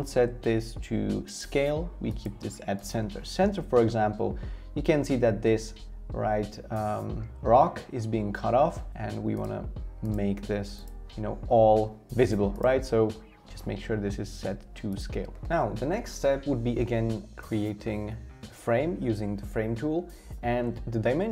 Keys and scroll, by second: 17.4 f, 20.4 v.